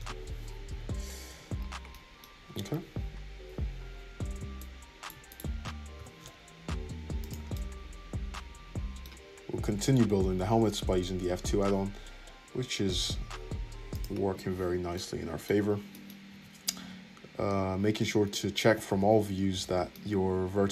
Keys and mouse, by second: 0.6 `, 1.2 Tab, 2.3 Tab, 2.3 click, 2.7-4.5 middle drag, 2.7 `, 4.5 shift+click, 5.0 shift+middle click, 5.2 click, 5.3-7.5 middle drag, 5.9 g, 7.5-12.2 drag, 9.7 `, 11.1 f, 12.2-20.7 shift+middle drag, 16.2 `, 16.7 `, 19.0 alt+z, 19.7 alt+z.